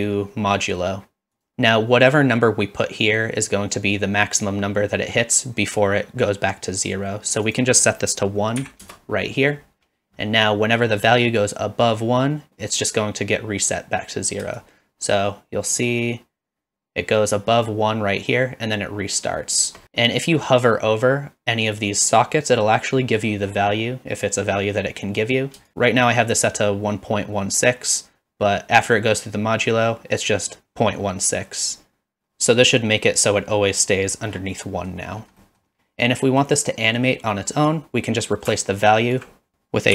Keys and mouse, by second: 7.6-9.7 drag, 14.8-19.8 shift+drag, 34.8 middle click, 35.5 middle click, 36.3 middle click, 38.6-39.2 alt+drag, 39.5 s, 39.5 BackSpace.